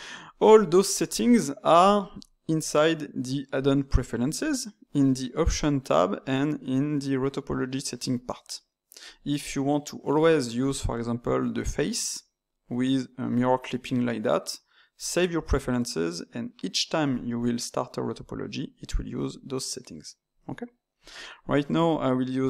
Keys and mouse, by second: 21.9-22.4 drag.